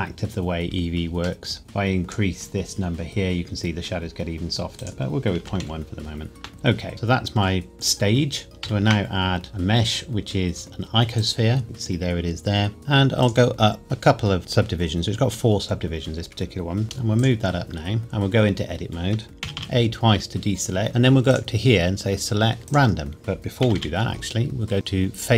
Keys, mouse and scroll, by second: 1.4 middle click, 1.6 click, 4.8 click, 6.3 KP_Enter, 6.5-6.9 scroll down 1, 6.9 middle click, 8.5 click, 8.6 shift+a, 11.2 click, 12.0-12.8 scroll up 1, 12.8 click, 16.1-16.8 scroll down 1, 16.8 g, 17.1 click, 18.0 Tab, 18.1 scroll down 1, 19.5 a, 19.7 a, 21.3 click, 22.7 click, 23.6 a, 23.7 a, 25.2 click.